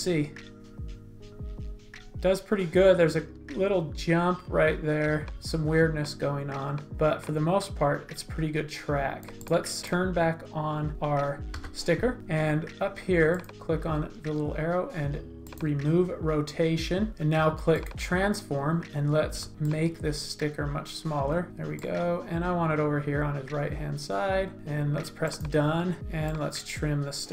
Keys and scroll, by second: 11.5 v.